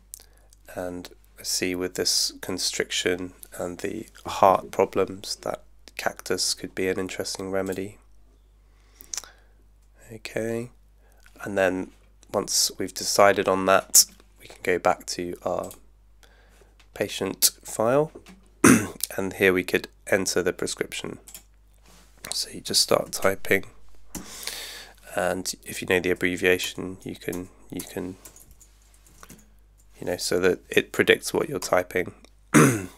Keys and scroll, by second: 22.5-23.7 typing, 26.7 BackSpace, 28.8-29.6 typing, 31.7 Return.